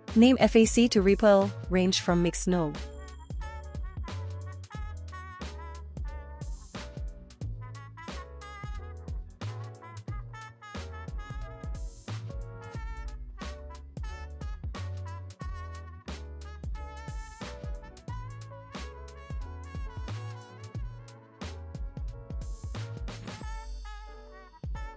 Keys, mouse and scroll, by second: 1.4 click, 2.3-12.0 drag, 7.9 BackSpace, 16.2 middle click, 17.3 click, 17.4 scroll down 2, 17.5 middle click, 17.8 click, 18.6 click, 18.9-20.5 drag, 20.6 shift+d, 21.3 scroll up 1, 21.6-21.9 drag, 22.3-24.4 drag, 24.1 p.